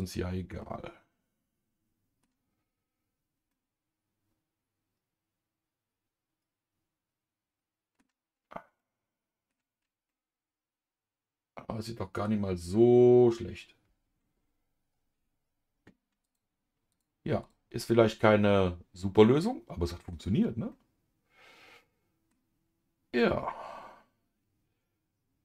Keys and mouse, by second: 0.0 click, 0.6-2.2 middle drag, 3.5-8.0 middle drag, 8.7 middle click, 10.0-12.2 middle drag, 16.2 click, 17.8-20.1 middle drag, 20.7-22.3 middle drag, 23.1-25.4 middle drag.